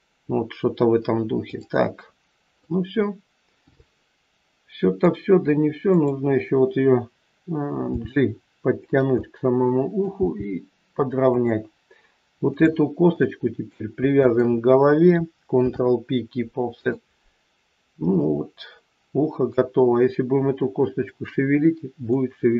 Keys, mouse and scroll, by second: 1.4 click, 2.5 middle click, 5.8 click, 8.0 g, 9.1 middle click, 10.1 g, 12.5 click, 13.1 middle click, 14.1 shift+click, 15.5 ctrl+p, 17.6 scroll down 2, 18.2 middle click, 18.2-18.5 scroll down 1, 22.1 middle click.